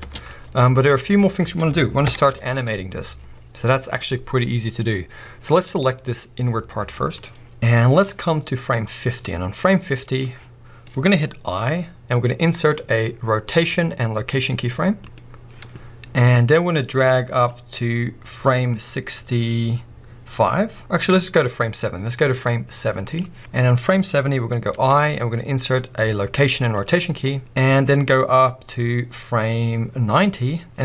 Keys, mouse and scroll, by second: 0.0 space, 0.3 middle click, 0.9-2.1 scroll up 1, 2.1 shift+Left, 5.7-7.4 drag, 7.8-8.7 middle drag, 8.7-10.9 drag, 10.9-17.5 middle drag, 17.5-23.4 drag, 23.4-28.1 middle drag, 24.0-24.7 scroll up 2, 28.1-30.8 drag.